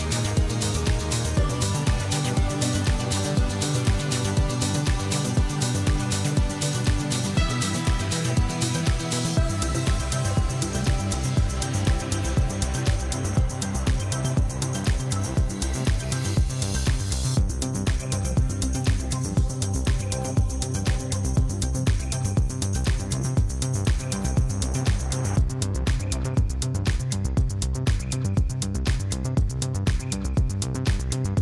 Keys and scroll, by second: 0.0-3.0 typing, 4.9-5.5 typing, 5.7 Return, 7.1 5, 7.4 Return, 7.8 Tab, 8.3 alt+a, 9.9 Tab, 10.7 2, 11.8 ctrl+b, 11.9 ., 12.0 0, 12.3 Return, 12.8 Tab, 14.1 ctrl+b, 14.2 ., 14.3 0, 14.6 Return, 14.7 Tab, 16.2 ctrl+b, 16.4 ., 16.5 0, 16.7 Return, 17.2 Tab, 18.8 ctrl+b, 18.9 ., 19.1 0, 19.3 Return, 19.5 Tab, 20.9 ctrl+b, 21.1 ., 21.2 0, 21.4 Return, 21.6 Tab, 22.9 ctrl+b, 23.1 ., 23.2 0, 23.4 Return, 23.6 Tab, 25.1 ctrl+b, 25.2 ., 25.3 0, 25.6 Return, 25.8 Tab, 27.2 ctrl+b, 27.3 ., 27.5 0, 27.8 Return, 28.0 Tab, 29.5 ctrl+b, 29.7 ., 29.8 0, 30.0 Return, 30.2 Tab.